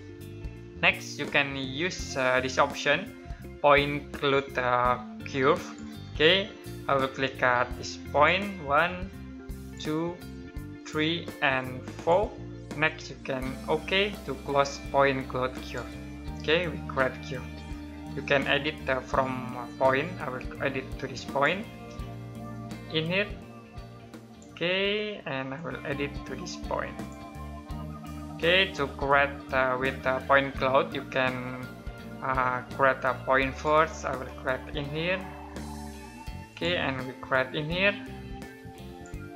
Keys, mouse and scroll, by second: 5.4 click, 19.4 click, 33.2 click, 36.3 click.